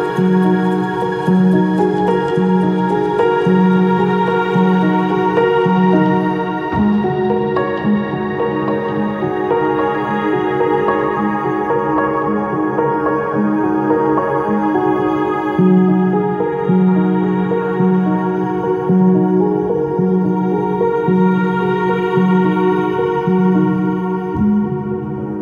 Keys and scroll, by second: 23.6 ctrl+z.